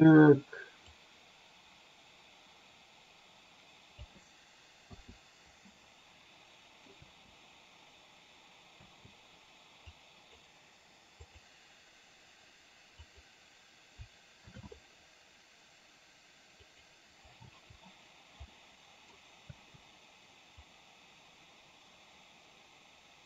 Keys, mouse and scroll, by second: 1.1-4.2 drag, 5.1 i, 6.1-6.9 middle drag, 7.2 space, 8.8 space, 10.1-10.6 drag, 13.1 click, 14.7 shift+d, 17.6 space, 18.7-19.2 middle drag, 19.6 space, 20.8-23.2 drag.